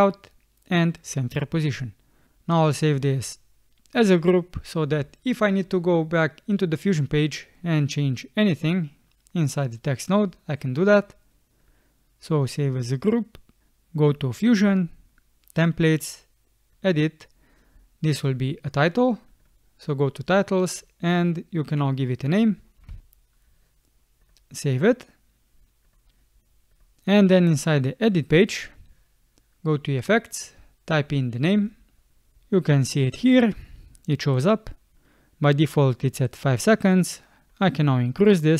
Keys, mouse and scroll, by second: 23.0 typing.